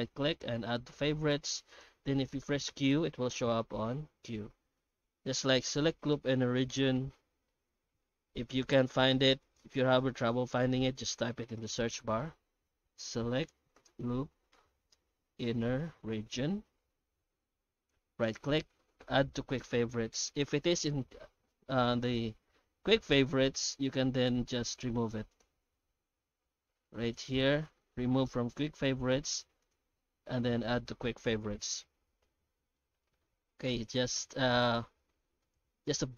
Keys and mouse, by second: 2.4 q, 7.0 F3, 9.4-10.7 drag, 11.4 F3, 14.4 o, 15.4 n, 31.9 Tab, 32.7-33.2 middle drag, 33.5 Tab, 34.0 s, 35.6 Tab.